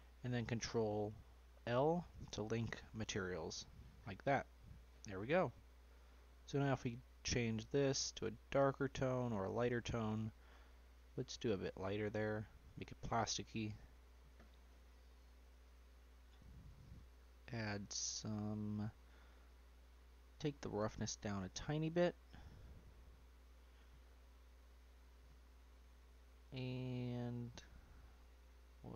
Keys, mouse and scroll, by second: 1.6 ctrl+l, 3.8 scroll down 2, 4.2-5.4 middle drag, 5.4-6.3 scroll up 1, 6.3 click, 12.5 click, 12.9-15.0 middle drag, 15.0 click, 16.5-17.8 scroll down 5, 17.8-19.4 scroll down 1, 19.4-19.8 scroll down 1, 19.8-22.8 drag, 24.5-26.9 drag, 26.9-28.2 scroll down 2, 28.2-28.9 scroll down 5.